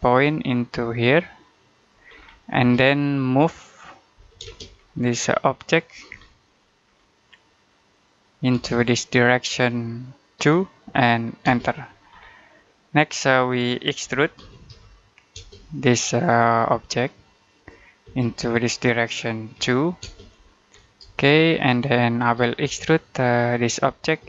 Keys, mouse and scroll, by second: 2.0-2.4 scroll down 1, 2.4 space, 2.6 middle click, 4.1 m, 4.3 space, 4.6-5.7 scroll up 1, 5.7 click, 6.0 scroll down 1, 6.3 middle click, 6.7-7.5 scroll up 1, 7.8 click, 8.6 click, 10.2 2, 11.3 space, 11.9-12.6 scroll down 1, 12.6 middle click, 13.7-15.2 typing, 17.4 click, 17.9 space, 19.4 2, 19.9 space, 20.6-20.9 scroll down 1, 21.0 shift+middle click, 22.5 space, 23.5 click, 24.1 space.